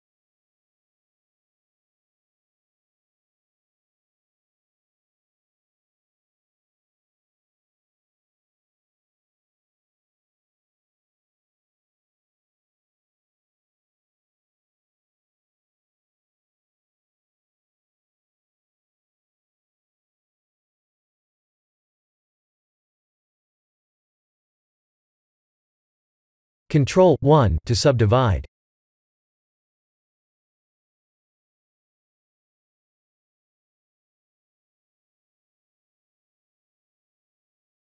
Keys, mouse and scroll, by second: 1.1 click, 1.5 click, 2.1 click, 2.9-6.9 drag, 7.7-8.8 drag, 9.4-11.6 drag, 11.9 click, 13.1-14.4 middle drag, 15.4-18.2 drag, 18.6-20.6 middle drag, 20.8-21.6 scroll up 5, 21.6-22.7 middle drag, 22.9-23.5 scroll down 2, 23.6-24.1 shift+middle drag, 24.3-25.5 middle drag, 26.1 click, 27.1 Tab, 29.3 ctrl+1, 30.5 ctrl+3, 31.4 scroll up 4, 31.9-35.8 middle drag, 36.2 ctrl+alt+KP_0, 36.9-37.8 typing.